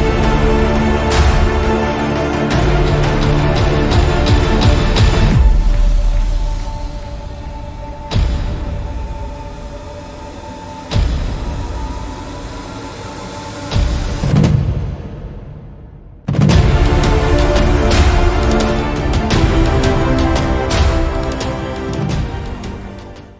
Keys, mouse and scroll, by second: 11.0 click, 11.5 click, 16.2-16.9 shift+middle drag, 17.1-18.6 middle drag.